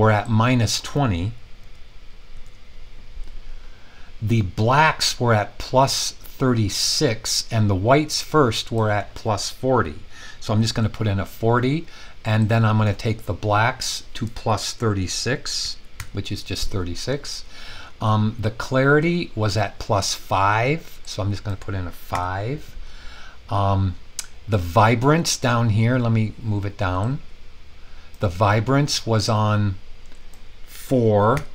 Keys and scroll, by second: 1.6-3.0 typing, 10.3-11.2 typing, 15.6-15.9 typing, 22.1 5, 31.3 4.